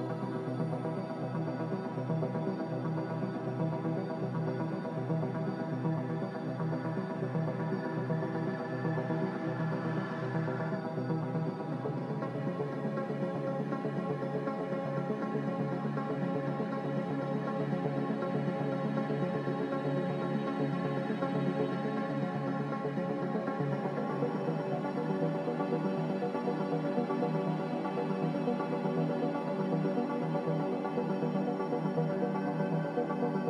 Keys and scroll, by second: 7.9-10.0 typing, 16.5-18.7 typing, 20.3-22.0 typing.